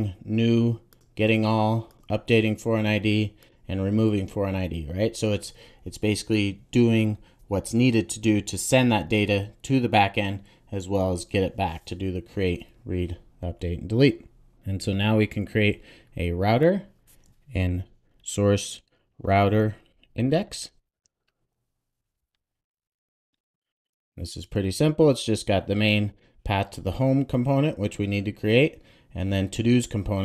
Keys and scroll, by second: 17.6 super+n, 23.8 Return, 26.5 super+s.